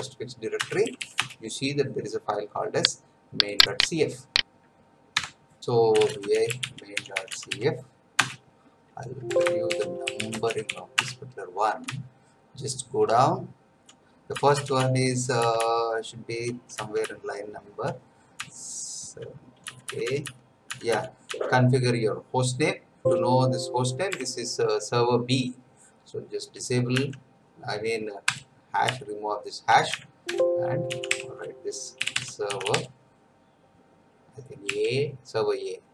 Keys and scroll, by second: 0.0-0.8 typing, 0.6 Return, 1.1 Return, 5.2 F9, 5.6 Return, 5.7-8.0 typing, 8.2 Return, 9.3 Escape, 9.4-11.0 typing, 11.8 Down, 13.1 Down, 15.6 Down, 17.5 Down, 21.3 Down, 23.0 shift+;, 24.1 BackSpace, 26.9 Up, 28.2 Delete, 28.8 Right, 30.2 Escape, 30.6-33.2 typing, 34.6 a.